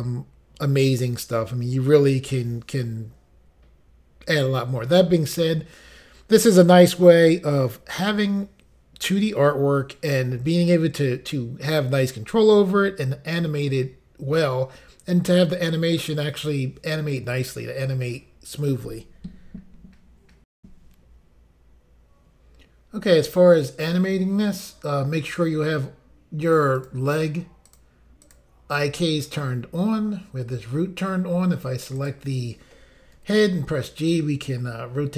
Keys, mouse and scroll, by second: 20.5 Insert, 24.9 scroll down 3, 26.7 click, 26.9 click, 27.6 click, 27.7 click, 28.2 click, 28.7 click, 28.8 click, 31.9 click, 32.1 click, 33.1 g.